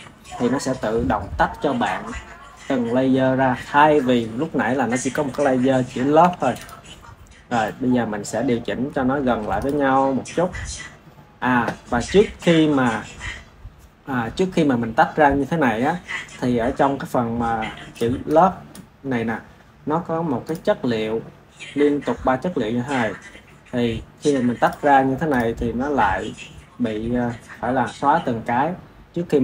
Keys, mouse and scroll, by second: 6.1 Tab, 6.5 click, 7.5-9.1 middle drag, 9.1 KP_1, 9.5 click, 17.8 click, 18.2-19.1 drag, 20.4 click, 24.5 click, 25.2 click.